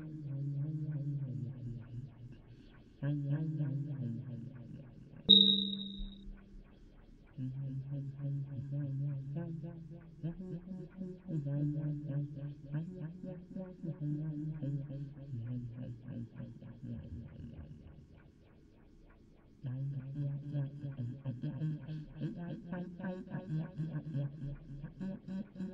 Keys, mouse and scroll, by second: 5.5 d, 6.0 d, 6.8 d, 6.9 click, 7.2 click, 7.5 click, 7.6 d, 8.8 d, 8.9 click, 10.0 d, 14.3 d, 14.4-15.7 drag, 16.6 d, 20.7-23.6 d, 20.8-23.5 drag.